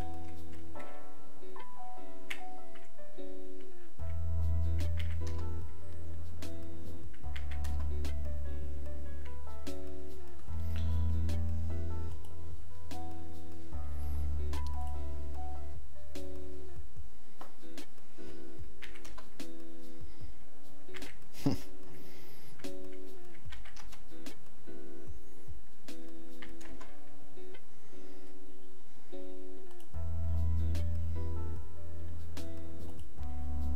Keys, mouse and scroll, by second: 14.8 click.